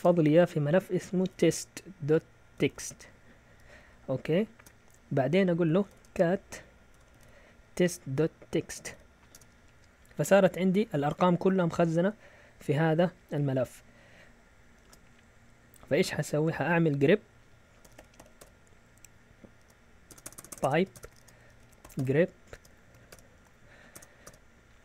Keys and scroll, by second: 0.0-3.2 typing, 4.5 Return, 4.6-9.8 typing, 13.4 Up, 14.7 space, 14.8 space, 17.6-24.7 typing.